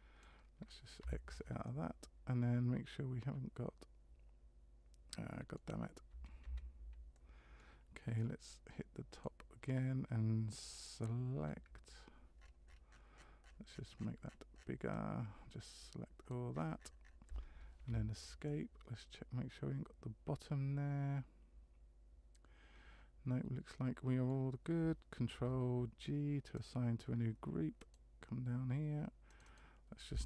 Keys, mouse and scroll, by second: 1.6 middle click, 6.1 a, 6.4 a, 7.1 middle click, 9.1 click, 11.4 c, 18.4 middle click, 25.3 ctrl+g, 27.8 click, 29.3 click, 29.4 click.